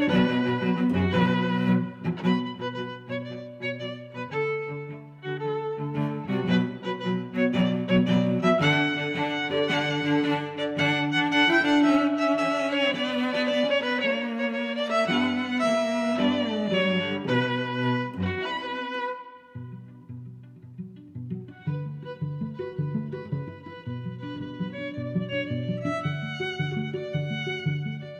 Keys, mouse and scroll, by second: 1.2 middle click, 2.2 shift+super+Tab, 3.4 click, 6.7 click, 8.3 click, 8.8 click, 12.4 click, 17.4 Tab, 17.7 Tab, 19.4 d, 19.7 click, 20.6 z, 21.1 s, 22.6 click, 23.5 middle click, 24.8 click, 26.2 r, 26.5 z.